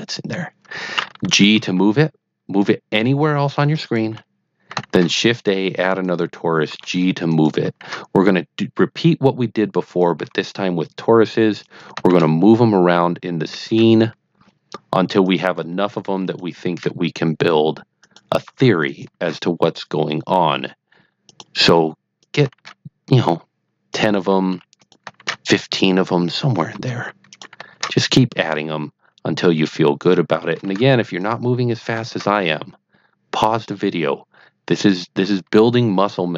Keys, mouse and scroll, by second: 1.5 g, 3.7 click, 4.8 shift+a, 5.9 click, 6.6 g, 7.2 click, 7.7 shift+a, 9.8 click, 10.1 g, 11.6 click, 12.0 shift+a, 13.6 shift+a, 15.2 click, 15.8 g, 16.2 click, 16.7 shift+a, 18.0 click, 18.4 g, 18.8 click, 19.1 shift+a, 21.2 click, 21.6 g, 22.1 click, 22.5 shift+a, 23.9 click, 24.2 g, 24.7 drag, 25.1 shift+a, 26.2 click, 26.7 g, 27.3 click, 27.7 shift+a, 29.9 click, 30.3 g, 30.6 a, 31.1 click, 32.0 shift+a, 34.7 click, 35.2 g.